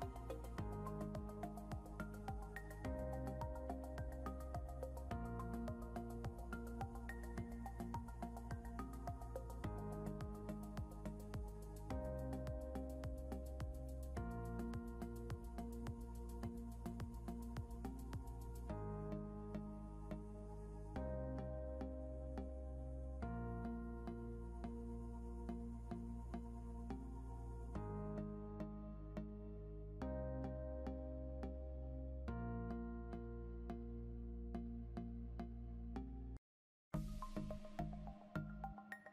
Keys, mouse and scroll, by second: 1.4 typing, 5.6 ctrl+k, 8.3 double click, 8.7 typing, 8.8 shift+click, 20.3 scroll up 1, 22.3 scroll down 1, 29.4 scroll, 29.5 scroll up 1, 32.6 scroll, 32.7 scroll down 1, 33.8 scroll up 1, 37.7 scroll down 1.